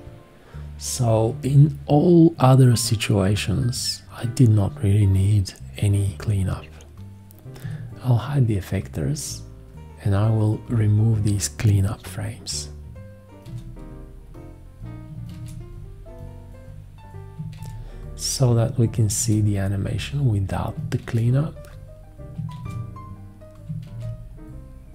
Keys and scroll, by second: 7.6 F1, 13.4 shift+x, 15.3 shift+x, 17.6 shift+x, 19.2 shift+x, 21.0 shift+x, 22.6 shift+x, 23.8 shift+x.